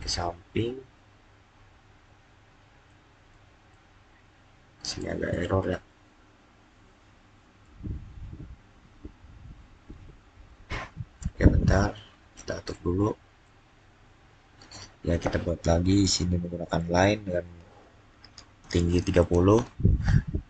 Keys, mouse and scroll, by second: 1.3-2.7 scroll down 1, 2.7 middle click, 3.6-7.4 middle drag, 7.4 scroll down 1, 11.4-11.7 scroll down 1, 12.5 middle click, 13.6-15.0 scroll down 1, 15.0 click, 18.5 click, 18.9-19.6 typing.